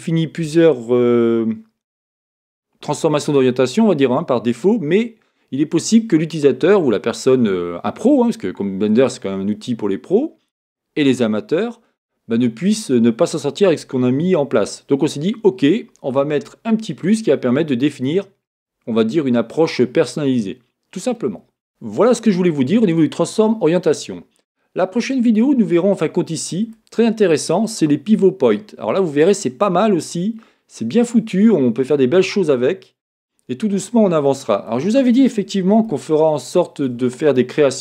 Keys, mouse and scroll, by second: 32.3-37.8 middle drag.